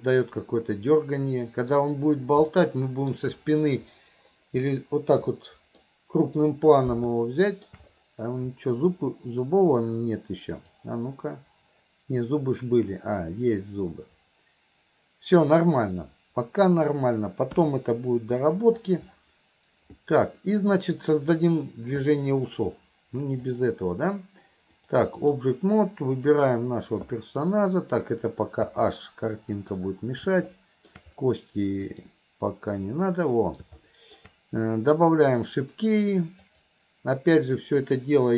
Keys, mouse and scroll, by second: 2.5-3.1 middle drag, 5.4-5.9 middle drag, 7.3-7.7 middle drag, 10.9-17.1 drag, 23.4 click, 24.7-25.5 drag, 26.3 click, 28.7 h, 29.6 click, 30.6-30.9 middle drag, 31.9 click, 32.9-33.6 middle drag, 33.9-34.2 middle drag, 35.3 click, 36.5 click, 37.9 click.